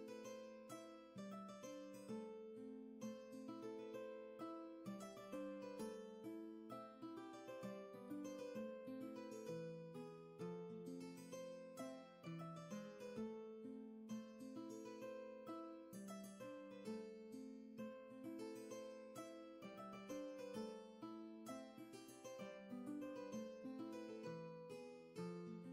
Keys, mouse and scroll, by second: 8.2 ctrl+z, 20.6 ctrl+z, 22.9 ctrl+z, 24.1 ctrl+shift+z.